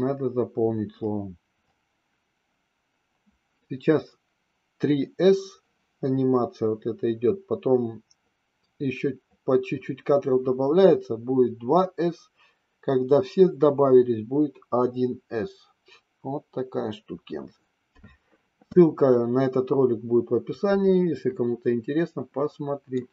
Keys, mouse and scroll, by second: 22.9-23.1 middle drag.